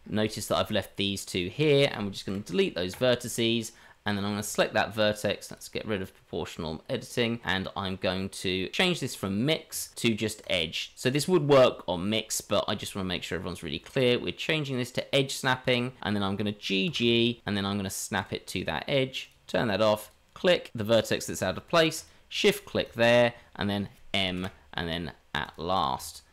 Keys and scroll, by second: 2.3 Delete, 16.8 g, 24.3 m, 25.9 Tab.